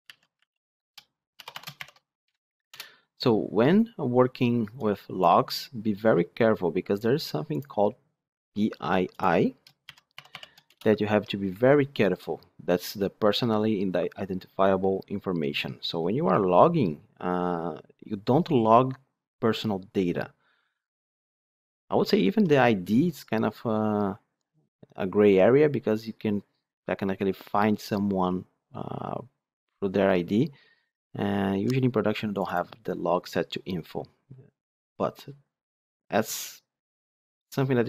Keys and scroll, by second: 2.6 Return.